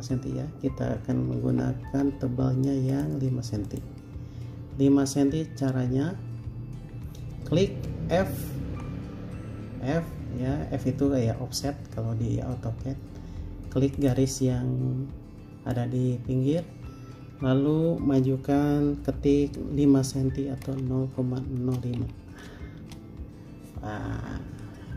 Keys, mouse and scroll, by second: 1.7 f, 2.2-3.5 scroll up 1, 6.9 Escape, 8.8 f, 20.9-22.2 typing, 23.0 Return.